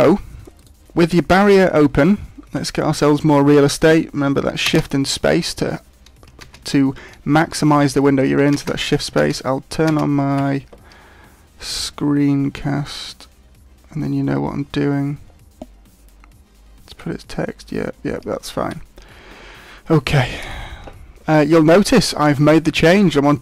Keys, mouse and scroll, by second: 13.6 scroll down 4, 14.7-18.0 scroll down 4, 18.7 n, 20.4 t.